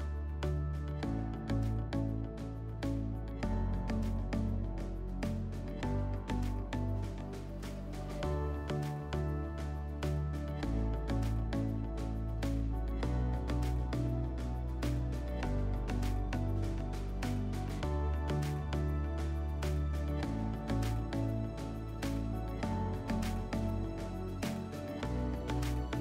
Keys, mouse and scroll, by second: 0.5 click, 1.6 click, 3.3 click, 6.6 click, 8.6 click, 8.7 click, 9.4-12.1 typing, 16.0 click, 19.3 click, 21.2 alt+middle click, 22.2 alt+scroll, 23.8 click, 25.1 click.